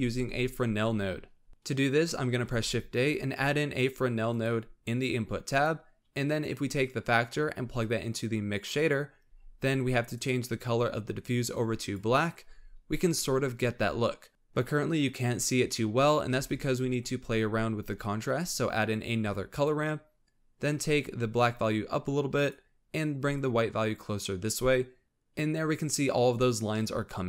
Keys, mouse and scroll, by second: 1.3 scroll down 3, 1.5 shift+a, 2.5 shift+a, 6.9-9.4 drag, 9.4 scroll up 5, 10.1 click, 12.7 scroll up 3, 14.3 scroll down 3, 16.3 shift+a, 21.5-25.0 drag, 26.7-27.2 middle drag.